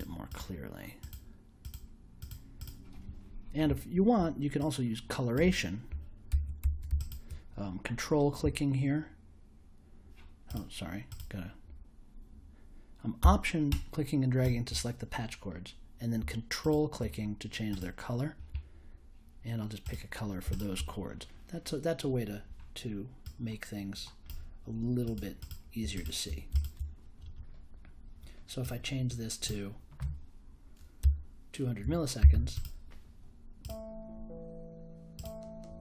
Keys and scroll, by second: 30.0 1, 31.0 BackSpace, 31.8 2, 32.1 0.